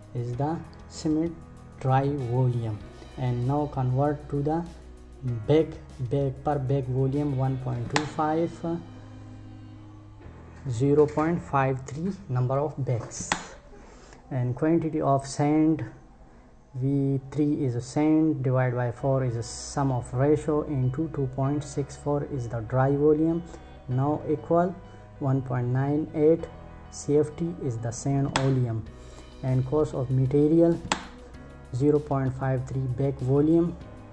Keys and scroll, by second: 7.4 Return, 12.7 Return, 27.8 Return, 30.4 Return.